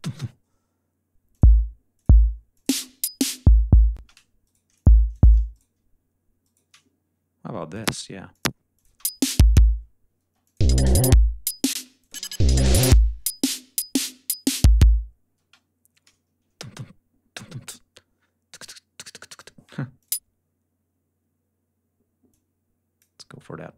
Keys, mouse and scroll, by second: 1.2 click, 1.8 click, 2.4 click, 2.6 space, 3.8 space, 4.3 shift+right click, 4.6 shift+click, 5.0 shift+click, 5.4 shift+right click, 6.3 shift+right click, 7.6 click, 8.1 click, 8.6 click, 8.7 space, 9.7 ctrl+scroll down 2, 10.1 ctrl+space, 10.3 ctrl+click, 10.7 ctrl+scroll up 2, 11.6 space, 11.8 click, 13.4 ctrl+scroll down 2, 13.8 ctrl+scroll up 2, 15.2 space, 16.0 ctrl+scroll up 2, 17.0 scroll down 2, 18.5 click, 19.8 click, 22.1 click, 23.6 click.